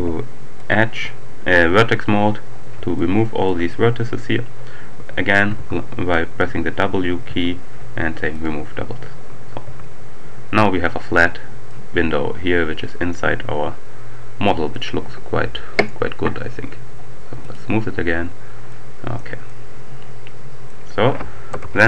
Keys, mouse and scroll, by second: 0.4 click, 1.9-2.5 scroll up 2, 2.5-3.0 scroll up 1, 3.0 shift+click, 5.4 w, 7.2 w, 8.3 click, 9.3-11.2 scroll down 2, 9.6 Tab, 11.7-15.3 drag, 15.8 right click, 17.4 click, 18.2-18.7 scroll down 1, 18.7 middle click, 19.2 scroll down 1, 19.5 middle click, 21.8 ctrl+alt+Right.